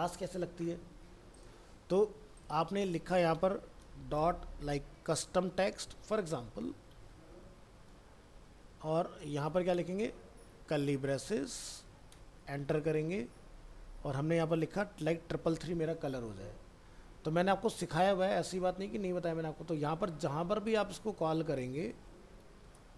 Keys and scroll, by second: 8.8 ctrl+z, 14.7 ctrl+s.